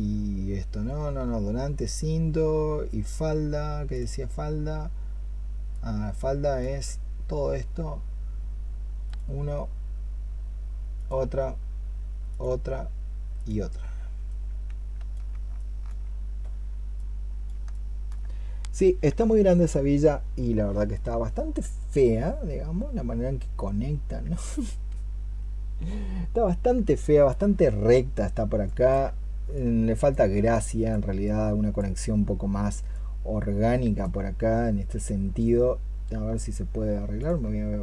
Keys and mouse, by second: 15.4 alt+click, 17.6 alt+click, 28.5 alt+click, 33.6 alt+click, 37.0 alt+click.